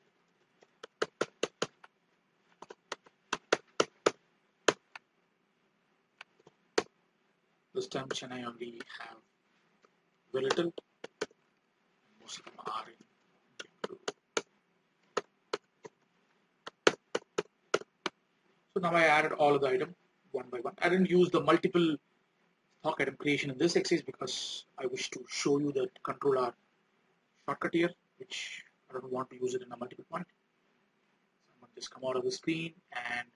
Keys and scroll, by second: 11.5 alt+Tab.